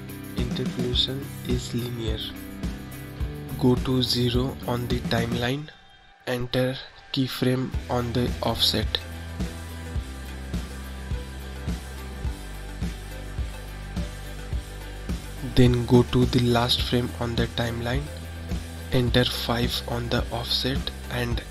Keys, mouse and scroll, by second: 7.0-10.1 drag, 12.3 click, 15.4-20.1 drag, 21.3 click.